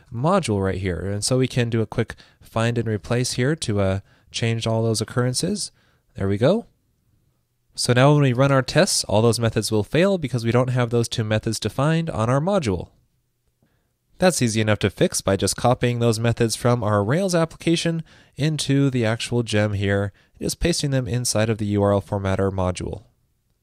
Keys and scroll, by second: 0.3 alt+shift+Left, 1.9 shift+super+e, 4.4 ctrl+super+f, 17.2 super+c, 22.0 super+v, 23.0 super+s.